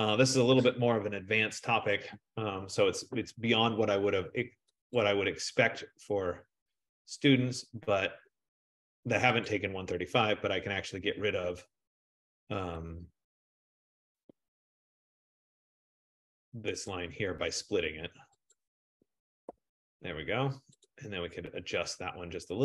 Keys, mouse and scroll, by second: 1.1 ctrl+=, 1.5 ctrl+=, 1.7 ctrl+=, 5.2 click, 7.7 click, 9.6 click, 13.1 click, 14.4 BackSpace, 17.0 click, 17.7 click, 18.7 click, 19.6 BackSpace, 21.0 click.